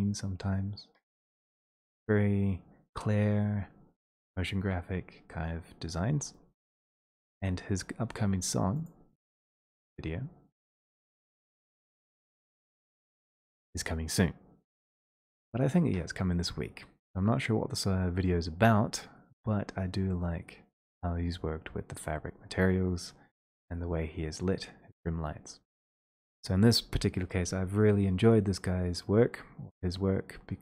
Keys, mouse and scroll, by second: 0.8-2.3 scroll, 2.3-2.8 scroll, 3.4-3.9 scroll, 5.4 middle click, 5.4-7.0 scroll, 7.8-8.6 scroll, 8.9 click, 8.9 scroll.